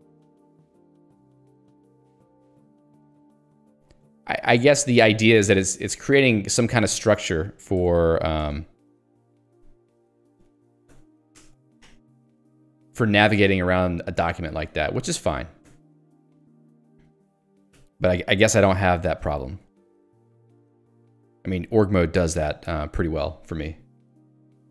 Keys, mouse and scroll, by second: 2.2 scroll up 1, 4.9 ctrl+g, 6.7 ctrl+w, 6.9 c, 8.5 Return, 9.3 ctrl+g, 9.5 q, 10.3 Escape, 11.4 ctrl+g, 11.6 Escape, 12.0 ctrl+u, 14.6 j, 15.8 ctrl+d.